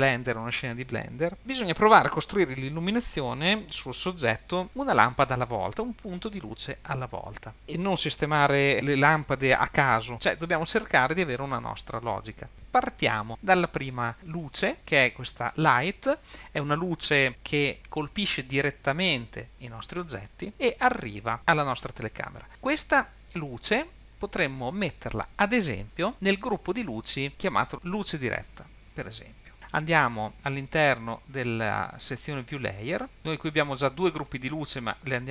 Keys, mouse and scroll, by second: 14.7 click, 32.6 click, 33.1-33.4 scroll down 10, 35.2 drag.